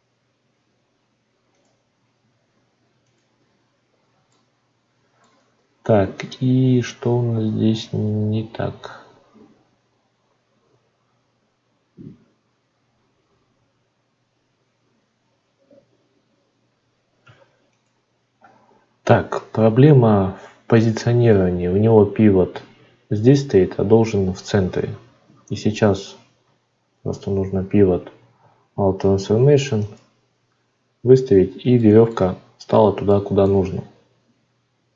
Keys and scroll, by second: 25.2 shift+a, 27.0 ctrl+a.